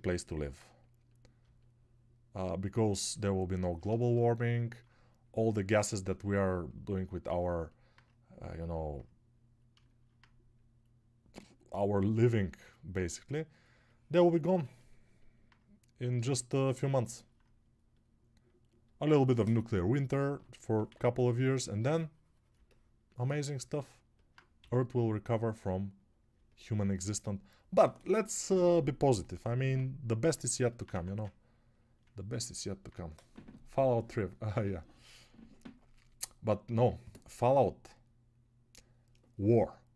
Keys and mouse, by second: 31.2 ctrl+1.